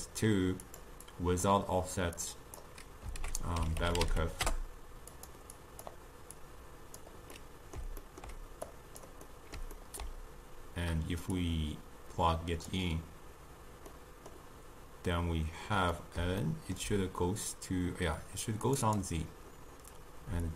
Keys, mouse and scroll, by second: 0.7 click, 1.1-2.4 drag, 3.3 ctrl+a, 5.6 click, 6.4-7.4 drag, 7.4-8.8 middle drag, 8.8 click, 9.4-11.4 middle drag, 11.4-14.0 drag, 14.0-18.7 middle drag, 18.7-20.5 drag.